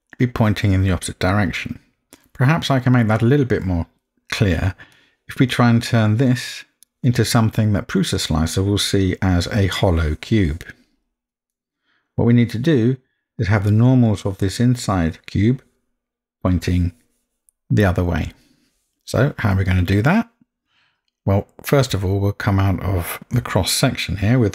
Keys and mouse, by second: 4.9 middle click, 11.6 middle click.